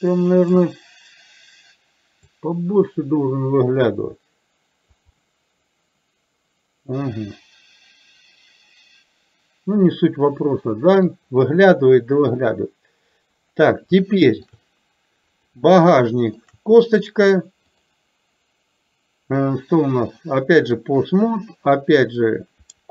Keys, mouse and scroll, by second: 2.3-5.1 drag, 5.2-11.1 middle drag, 12.2-13.2 drag, 14.1 shift+middle click, 15.4 click, 16.4 shift+click, 17.8-20.9 drag.